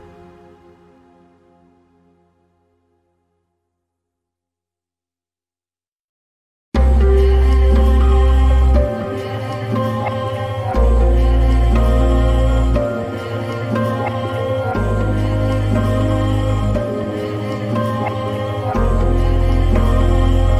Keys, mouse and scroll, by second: 0.6 click, 2.9-7.4 drag, 15.4-20.5 drag.